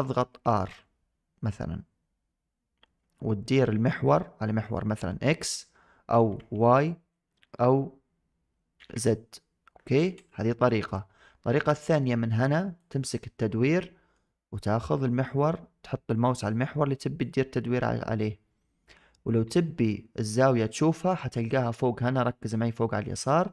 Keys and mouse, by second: 0.3 r, 12.8 click, 13.5-14.0 middle drag, 17.2-21.0 drag.